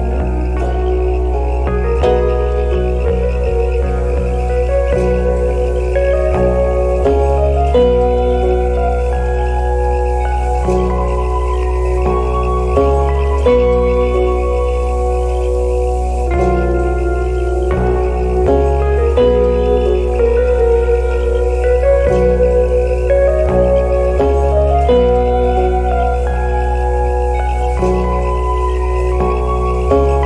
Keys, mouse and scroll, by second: 2.5 right click, 4.8 scroll down 1, 5.0 alt+click, 6.4 scroll up 1, 7.3 alt+click, 7.9 alt+middle click, 8.0 scroll up 1, 8.2 alt+click, 8.3 alt+middle click, 9.6 shift+click, 10.1 shift+click, 10.7 shift+click, 11.3 shift+click, 12.0 shift+click, 12.6 shift+click, 13.3 shift+click, 13.7 scroll up 1, 13.8 scroll down 1, 13.9 alt+click, 14.8 alt+click, 15.3 shift+click, 15.8 shift+click, 16.9 alt+middle click, 17.3 shift+click, 18.0 shift+click, 18.2 shift+click, 18.3 alt+click, 18.7 scroll up 1, 18.9 scroll down 1, 19.0 alt+middle click, 19.3 alt+click, 19.5 alt+middle click, 19.6 alt+click, 19.9 alt+click, 20.6 shift+click, 21.1 shift+click, 21.8 alt+click, 22.1 shift+click, 23.8 alt+click, 24.0 shift+click, 26.0 alt+click, 26.4 scroll down 1, 26.6 alt+click, 27.3-27.8 alt+scroll up 1, 28.0 alt+click, 29.3 alt+click.